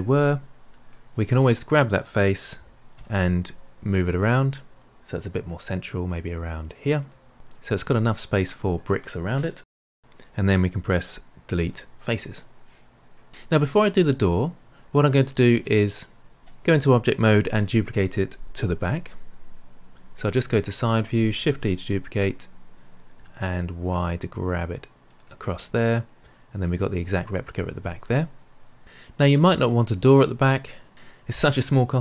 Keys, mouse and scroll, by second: 1.0 3, 1.2 click, 2.9 g, 11.4 Delete, 13.3-14.1 middle drag, 16.4 Tab, 20.0 KP_3, 21.4 shift+d, 25.4-28.5 middle drag.